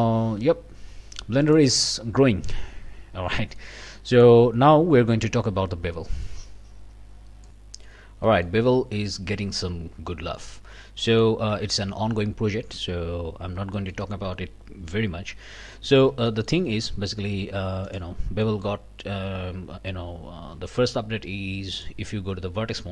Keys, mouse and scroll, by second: 1.4 click, 2.3 scroll down 1, 2.6-3.1 scroll up 2, 3.2 scroll down 1, 3.6 click, 5.5 scroll up 2, 6.1 middle click, 7.5 click, 8.3 middle click, 8.8 scroll up 2, 10.6 Tab, 11.1 middle click, 13.3 scroll up 2, 13.7 shift+click, 15.9 alt+a, 16.3 alt+click, 17.9 click, 18.4 click, 20.4 alt+a, 21.7 click.